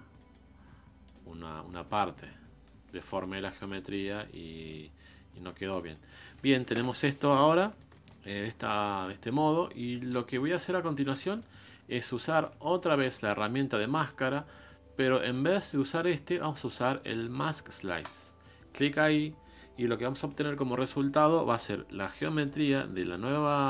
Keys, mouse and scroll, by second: 0.2 middle click, 1.0-3.9 ctrl+drag, 3.9 scroll down 3, 4.2 middle click, 4.6-5.5 scroll up 3, 5.5 scroll down 5, 5.8-8.2 middle drag, 8.2-8.6 scroll up 3, 8.6-20.8 shift+middle drag, 21.6-23.6 middle drag.